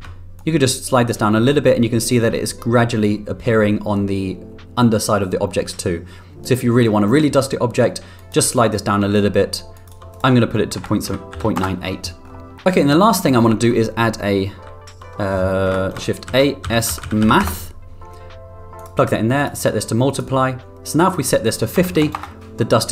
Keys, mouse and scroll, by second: 0.3-8.3 drag, 8.5-9.8 drag, 10.1-12.0 drag, 12.4 middle click, 12.6 middle click, 13.1 click, 14.7 shift+a, 17.2 shift+a, 19.4 click, 21.0-22.9 drag.